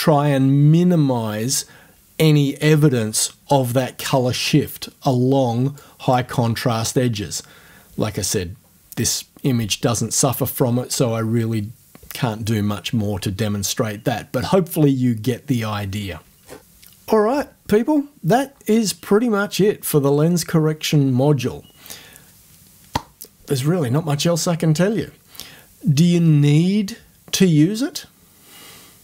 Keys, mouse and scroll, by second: 5.8 click, 16.4 scroll down 2.